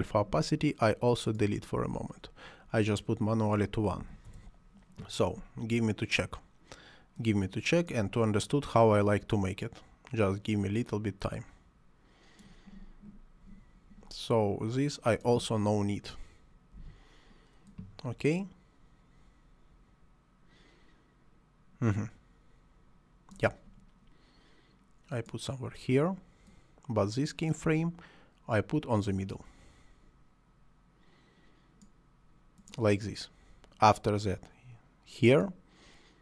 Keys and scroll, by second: 1.8 Delete, 3.9 1, 4.2 Return, 16.7 Delete.